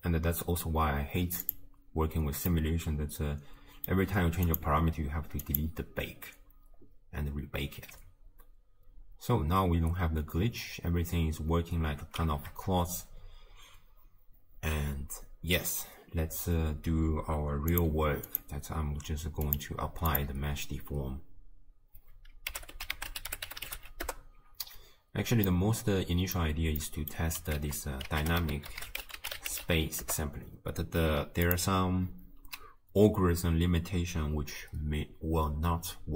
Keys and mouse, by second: 2.6-3.6 middle drag, 3.6 click, 4.5 click, 5.5-7.5 drag, 8.0 space, 12.0 space, 17.8 click, 18.3 click, 19.6 drag, 20.1-24.2 drag, 25.5-26.5 drag, 26.8 click, 27.6 ctrl+a.